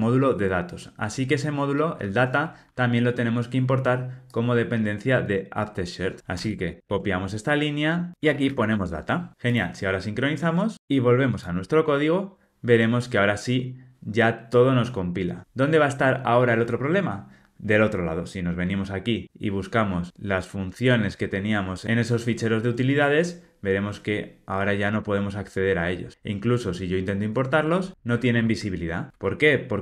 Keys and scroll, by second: 6.3 super+c, 6.8 super+v, 9.3 Escape, 28.3 alt+Return.